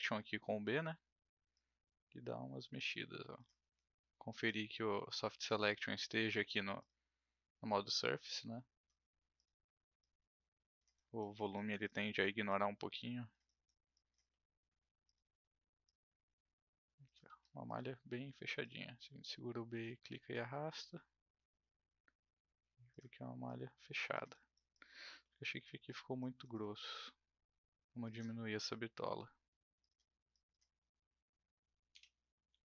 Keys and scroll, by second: 3.6 ctrl+z, 17.2 ctrl+z, 18.2 b, 23.0 ctrl+z, 31.9 b, 32.5 r.